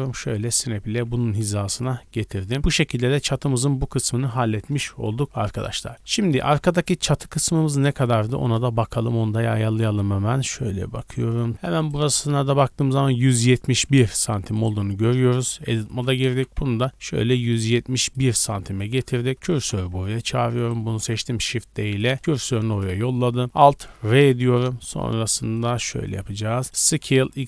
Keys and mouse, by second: 0.9 a, 1.1 a, 8.5 KP_1, 11.5 Tab, 11.8 2, 11.9-15.3 middle drag, 13.6 Tab, 15.3 Tab, 15.9-18.7 shift+middle drag, 16.3 g, 19.0 1, 19.4 shift+s, 19.9 Tab, 21.2 shift+d, 22.2 shift+s, 24.0 alt+r, 25.4 shift+click, 25.8-26.7 shift+middle drag, 26.7-27.4 drag, 26.8 s.